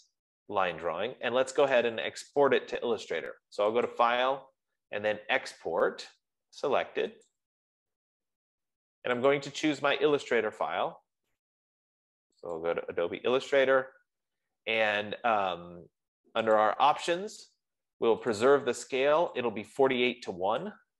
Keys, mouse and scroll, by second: 2.4 click, 4.6 click, 8.0 click, 9.9 click, 13.1 click, 17.0 click, 18.7 click, 19.8 click.